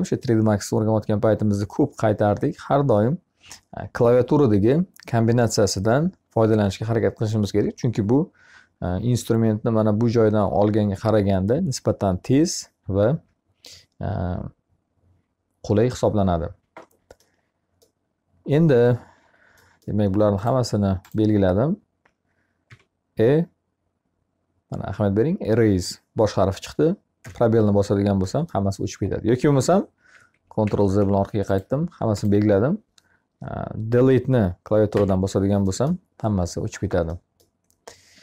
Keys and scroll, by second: 22.0 e, 29.5 ctrl+z, 34.3 Delete.